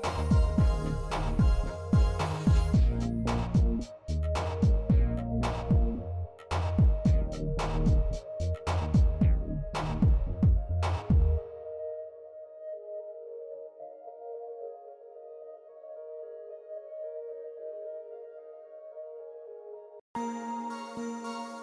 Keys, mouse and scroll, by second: 1.4 shift+middle drag, 1.9 middle click, 2.5 shift+middle click, 3.8-4.1 middle drag, 5.2 shift+middle click, 6.5 click, 6.7 middle click, 7.2-7.7 shift+middle drag, 8.2-8.8 shift+middle drag, 9.4 z, 11.3 middle click, 12.0 shift+middle click, 13.1 ctrl+middle click, 13.9-15.3 shift+middle drag, 18.2 click.